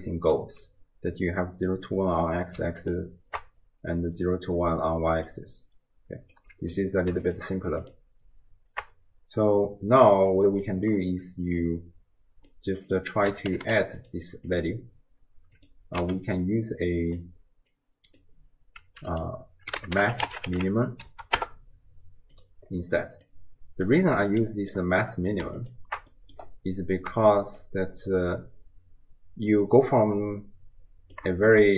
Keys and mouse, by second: 5.1 d, 5.3-6.4 drag, 6.4 d, 7.1 ctrl+d, 7.8 ctrl+shift+click, 10.3 click, 10.9 middle click, 11.7 click, 12.9-14.6 drag, 13.7 d, 16.0 x, 16.4 click, 17.7-22.5 drag, 23.3-24.0 drag, 24.3 middle click, 26.1 click, 26.1 middle click, 26.1 right click, 27.6-31.2 shift+drag.